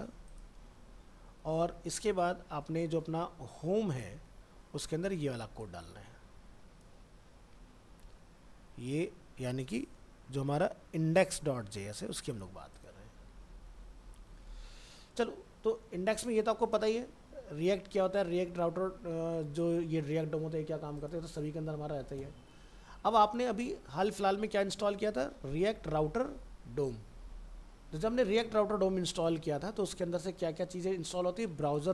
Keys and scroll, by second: 0.7 ctrl+v, 1.6 alt+Tab, 7.0 ctrl+c, 7.5 alt+Tab, 13.0 ctrl+a, 13.6 ctrl+v, 14.2 ctrl+s.